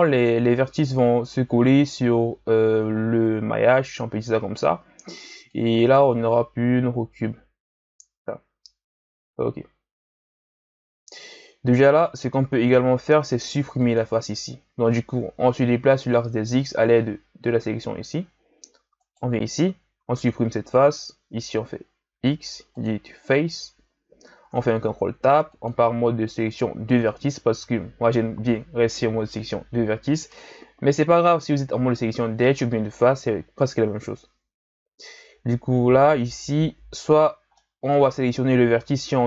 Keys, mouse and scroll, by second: 3.0-5.5 shift+scroll down 1, 5.5-8.6 drag, 12.0 right click, 13.0 ctrl+Tab, 19.0 right click, 20.1 x, 24.5 ctrl+Tab, 34.1 a, 35.1 a, 36.3-37.1 scroll up 1, 37.1 right click, 37.5-39.2 middle drag.